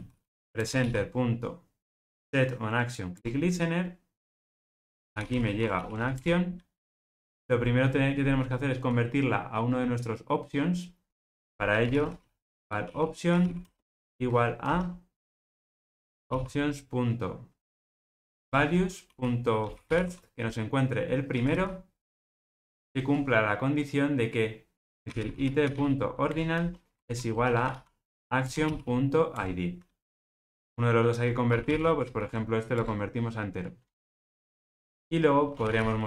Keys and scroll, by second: 0.6 Return, 18.4 Return, 26.3 Return, 30.2 alt+super+l, 32.7 Return.